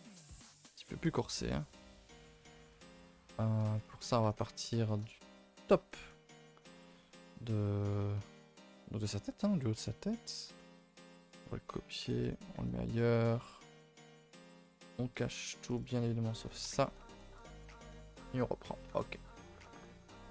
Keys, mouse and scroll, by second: 1.2 middle click, 1.7-2.7 scroll up 8, 2.1 shift+middle click, 2.7 KP_0, 4.6 middle click, 5.1-5.7 scroll up 8, 5.9 shift+middle click, 6.7 scroll up 1, 7.0-8.3 shift+middle drag, 8.3 scroll, 10.6-12.8 middle drag, 12.8 click, 13.7 click, 15.6 click, 15.8 click, 17.4 KP_0, 19.5 click, 19.9 scroll down 4.